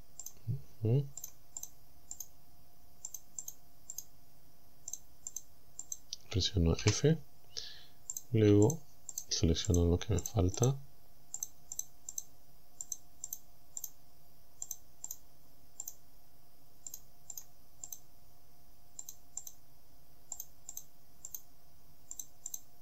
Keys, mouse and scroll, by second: 0.3 shift+right click, 1.3 shift+right click, 1.7 shift+right click, 2.2 shift+right click, 3.1 shift+right click, 3.5 shift+right click, 4.0 shift+right click, 4.9 shift+right click, 5.3 shift+right click, 5.9 shift+right click, 6.8 f, 8.2 right click, 8.7 shift+right click, 9.2 shift+right click, 9.7 shift+right click, 10.3 shift+right click, 10.6 shift+right click, 11.4 shift+right click, 11.8 shift+right click, 12.2 shift+right click, 12.9 shift+right click, 13.3 shift+right click, 13.9 shift+right click, 14.7 shift+right click, 15.1 shift+right click, 15.3 shift+middle click, 15.9 shift+right click, 16.9 shift+right click, 17.4 shift+right click, 17.9 shift+right click, 19.1 shift+right click, 19.5 shift+right click, 20.4 shift+right click, 20.8 shift+right click, 21.3 shift+right click, 22.2 shift+right click, 22.5 shift+right click.